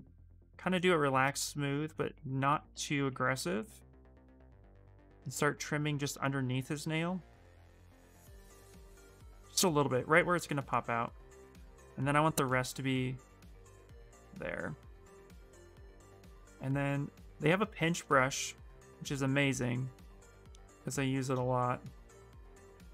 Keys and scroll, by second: 14.6 s, 15.7 b, 16.3 p, 18.8 s, 21.3 ctrl+z.